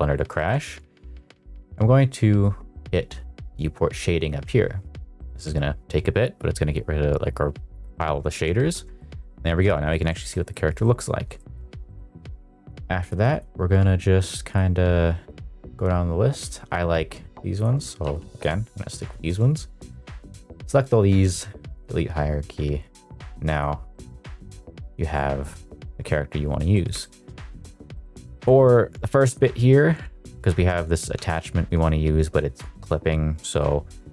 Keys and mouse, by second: 0.3 shift+middle click, 3.7-5.0 drag, 7.2-7.9 middle drag, 8.5 shift+middle drag, 8.9-9.5 shift+middle drag, 9.8 middle click, 10.1 shift+middle drag, 10.4 middle click, 10.8-11.2 shift+middle drag, 11.3 shift+middle drag, 12.9 click, 13.6 click, 14.1 click, 14.7 click, 15.2 click, 16.6 click, 18.0 q, 18.9 click, 21.1 q, 23.5 click, 24.7 click, 25.4 middle drag, 25.6 shift+middle drag, 26.7 middle click, 26.9 shift+middle drag, 28.3 click, 31.4 Tab, 33.5 Tab.